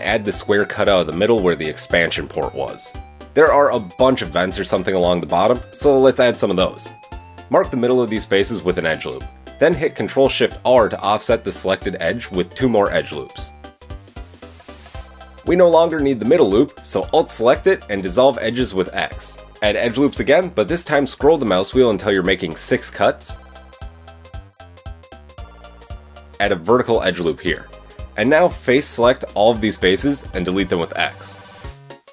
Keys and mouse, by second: 7.0 Tab, 7.5 ctrl+r, 12.9 ctrl+shift+r, 16.4 alt+click, 17.2 x, 21.8 ctrl+r, 26.2 click, 26.6 ctrl+r, 26.9-28.8 middle drag, 28.8-30.3 drag, 31.1-32.1 drag, 31.4 x.